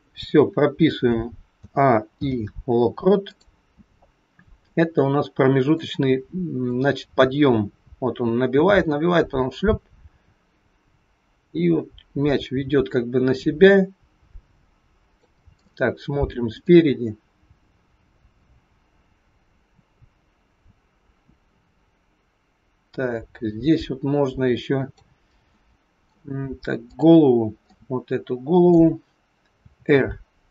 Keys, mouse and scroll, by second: 1.5 a, 2.1 i, 3.8-4.7 scroll down 6, 4.7 middle click, 6.7 click, 15.6 middle click, 18.4 click, 25.4 middle click, 26.8 click, 27.7 middle click, 29.7 r.